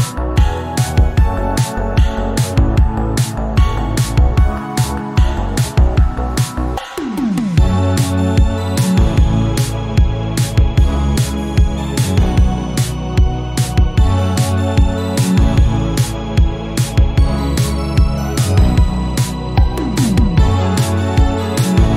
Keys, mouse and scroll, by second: 0.3 s, 1.7 shift+middle click, 2.4 e, 4.2-4.9 scroll up 1, 4.9 s, 6.5 shift+middle click, 6.8 scroll up 2, 7.0-8.7 shift+middle drag, 8.7 Tab, 9.0 scroll down 1, 9.8 click, 10.8-14.2 drag, 14.2 ctrl+z, 15.0-16.3 drag, 16.3 Tab, 17.1 e, 18.5 scroll up 1, 18.8 s, 20.1-21.5 drag, 21.8 shift+middle click.